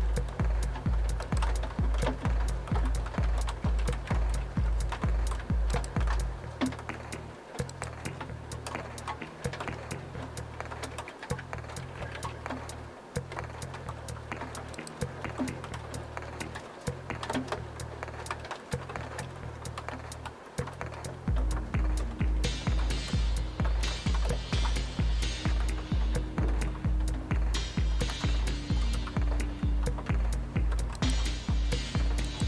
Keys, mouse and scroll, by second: 1.2 click, 3.8-4.4 typing, 5.7 click, 7.7 click, 9.2-9.6 typing, 10.2 Tab, 11.1 Tab, 11.6-12.3 typing, 14.8 click, 15.7 typing, 31.0 click, 32.3 click.